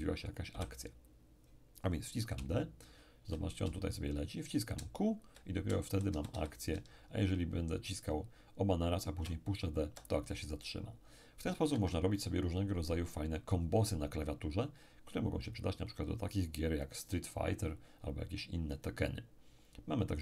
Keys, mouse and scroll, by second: 0.5 p, 2.3 d, 2.6 d, 3.7 d, 4.7 q, 5.0 q, 6.9 q, 11.7 Escape.